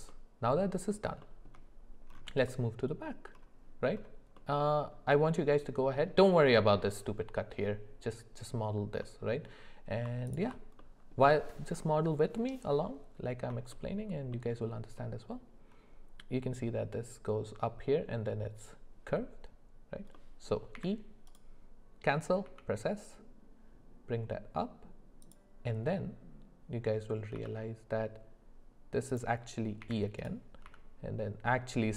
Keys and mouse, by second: 0.1 middle click, 1.2 shift+middle click, 9.0 middle click, 10.8 middle click, 13.7 shift+middle click, 14.3 middle click, 20.2 middle click, 20.7 e, 27.3 s.